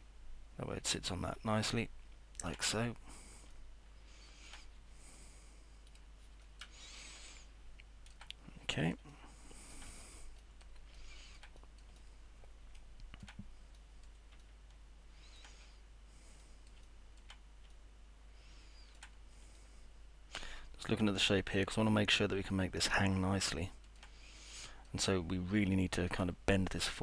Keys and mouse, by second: 0.0-2.5 alt+middle drag, 3.5-4.5 alt+middle drag, 7.3 alt+middle click, 8.7 middle click, 9.1 alt+middle click, 10.4 middle click, 11.0 alt+middle click, 11.6 middle click, 12.0-13.2 alt+middle drag, 13.8 middle click, 14.4-15.4 alt+middle drag, 16.9 alt+middle click, 17.7-19.0 alt+middle drag, 19.6-24.0 alt+middle drag, 24.6 middle click, 25.1-26.1 alt+middle drag.